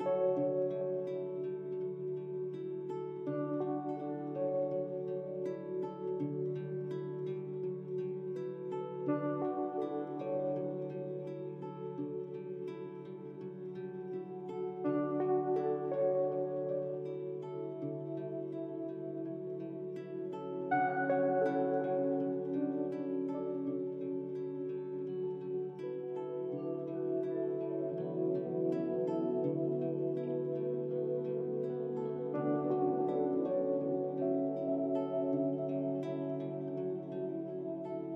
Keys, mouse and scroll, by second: 4.5-7.6 drag, 9.6-12.0 drag, 12.0 KP_0, 18.2 click, 31.5 click, 35.4 click, 37.7-38.1 drag.